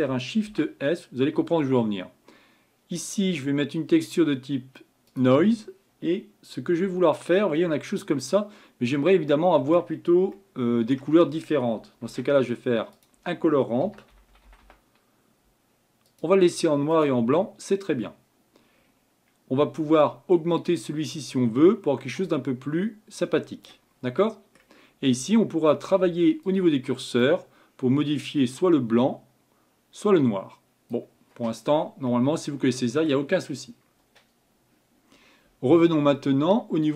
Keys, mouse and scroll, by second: 7.4-8.2 scroll up 6, 8.9-16.2 middle drag, 20.2-23.5 drag, 24.2-26.5 middle drag, 26.5-34.5 drag.